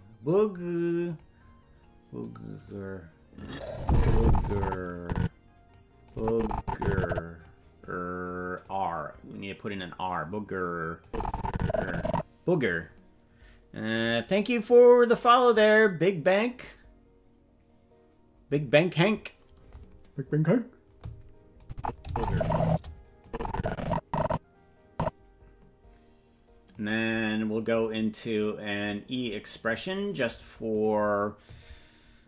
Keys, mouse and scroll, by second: 1.1 click, 2.2 click, 3.7-5.8 drag, 6.1-7.5 drag, 8.6 click, 9.7 click, 11.0-12.2 drag, 21.6 click, 22.0 space, 22.6 space, 23.2-26.7 drag, 29.6 click, 30.7 click.